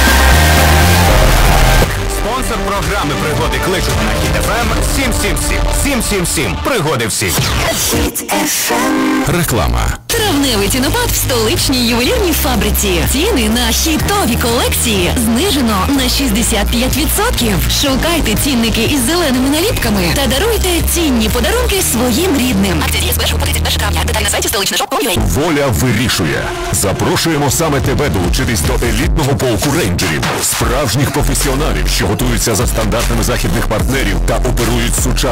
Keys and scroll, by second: 2.1 Page_Down.